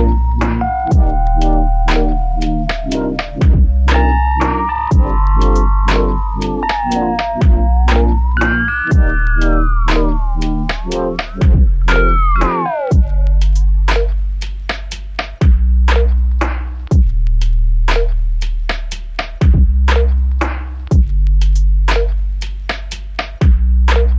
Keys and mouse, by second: 0.4 alt+click, 1.3 alt+click, 1.5 ctrl+alt+click, 4.0 double click, 17.6 ctrl+click, 20.7 ctrl+click, 22.8 ctrl+shift+click.